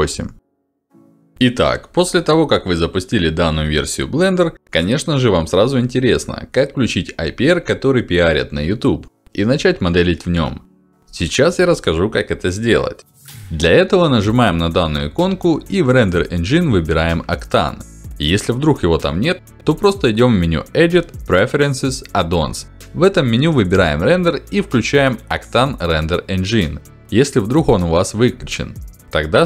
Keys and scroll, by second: 1.2 ctrl+alt+d, 12.6 ctrl+alt+d, 17.1 ctrl+alt+d, 22.8 ctrl+alt+d, 24.7 ctrl+alt+d.